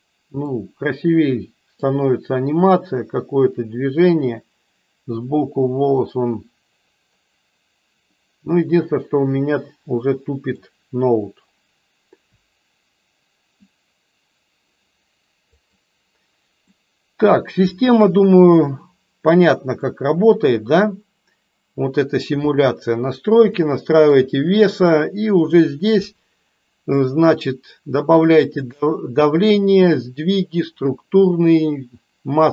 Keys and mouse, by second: 0.6-2.1 middle drag, 10.8-12.4 middle drag, 15.7 drag, 16.7-18.0 middle drag, 19.7-22.1 middle drag, 23.5 shift+middle click.